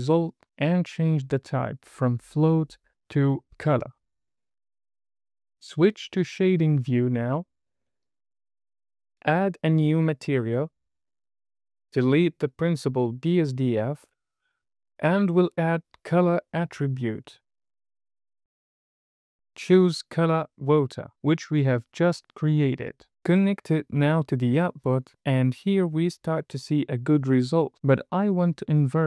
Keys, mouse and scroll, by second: 1.2 click, 2.5-5.0 drag, 5.9-8.2 drag, 9.7 click, 10.9 middle click, 12.8 drag, 13.6 click, 14.4 x, 16.0 shift+a, 18.2 t, 19.5 click, 19.9-20.5 scroll up 2, 20.7-21.9 drag, 23.3 drag, 25.5-26.1 scroll down 2.